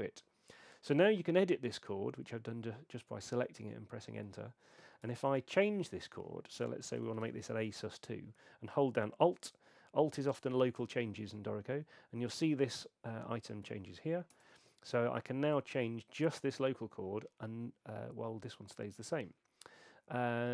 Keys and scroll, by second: 0.8 Return, 5.1 BackSpace, 6.6-7.7 typing, 14.3 alt+Return.